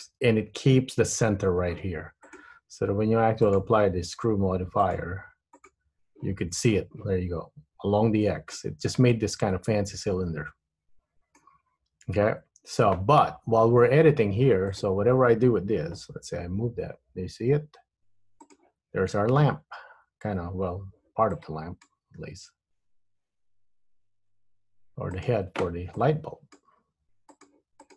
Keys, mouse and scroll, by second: 2.3 click, 4.9 click, 8.6 middle click, 12.2 KP_1, 13.5 scroll up 2, 14.8 click, 16.3 g, 21.5 click, 22.4 g, 26.1 click, 26.8 g.